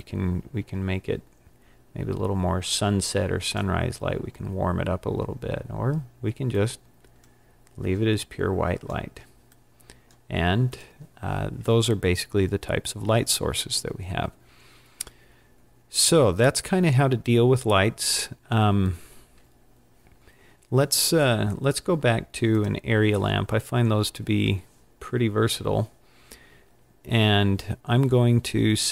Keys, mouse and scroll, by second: 10.7 click, 14.8 scroll down 2, 15.6-15.9 scroll down 3, 16.7 scroll up 2, 17.8-18.1 scroll up 2, 22.5 click.